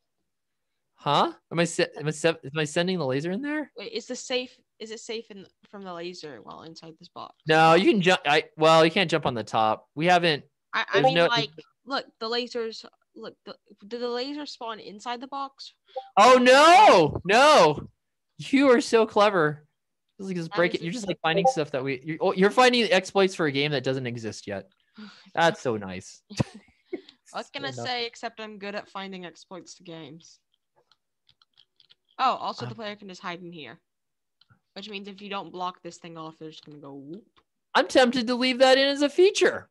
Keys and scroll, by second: 2.8 s, 5.6-7.7 typing, 8.7 space, 10.5 d, 10.8 a, 11.5 d, 12.2 w, 15.9-28.7 typing, 30.0-33.2 typing, 34.4-36.5 typing, 39.0 w, 39.5 space.